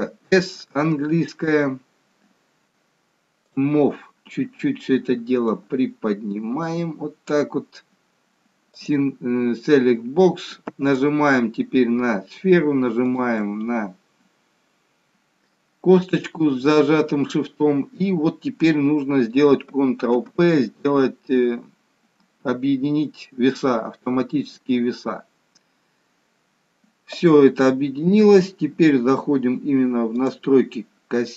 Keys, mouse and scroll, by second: 3.5 click, 5.4 click, 9.7 click, 10.9 click, 13.1 shift+click, 20.1 ctrl+p, 30.1 click.